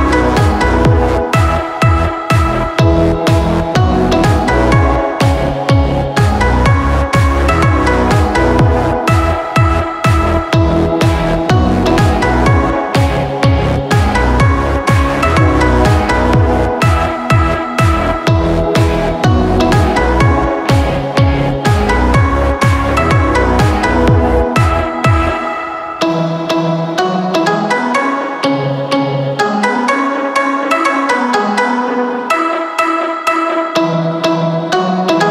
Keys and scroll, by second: 0.2 f, 3.3-5.0 typing, 9.3-10.0 typing, 18.9 b, 22.7 Escape.